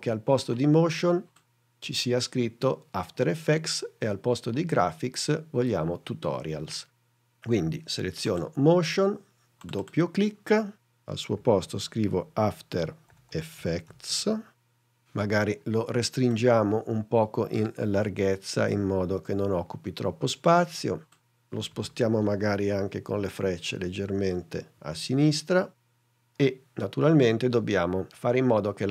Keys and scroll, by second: 11.4-14.3 typing, 22.2 shift+Left, 24.1 shift+Right.